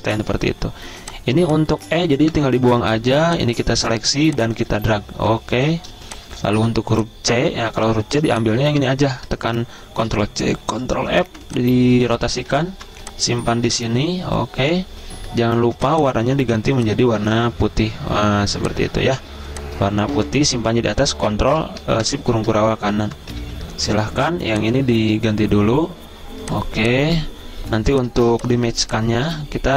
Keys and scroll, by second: 2.4 Delete, 6.7 v, 10.3 ctrl+c, 10.8 ctrl+f, 11.5 r, 12.9 v, 19.5-20.8 typing, 22.2 ctrl+shift+], 23.3-24.1 typing, 28.3-29.7 typing.